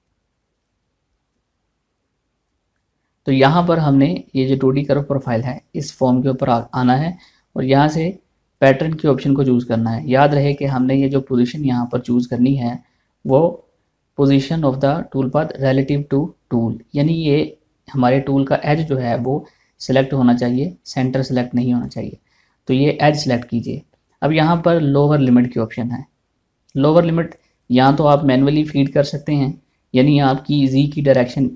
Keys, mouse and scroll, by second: 3.1-7.7 drag, 7.7 click, 23.6 click, 27.4 click.